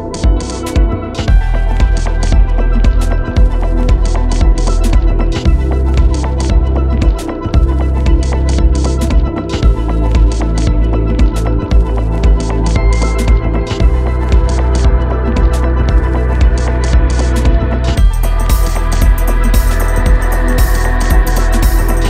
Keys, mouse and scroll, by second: 1.2 ctrl+space, 1.3 ctrl+click, 1.6 ctrl+space, 2.4 ctrl+space, 2.9 ctrl+space, 3.3 click, 3.5 space, 7.0 click, 9.7 typing, 13.5 click, 13.5 typing, 16.0 click, 16.0 typing.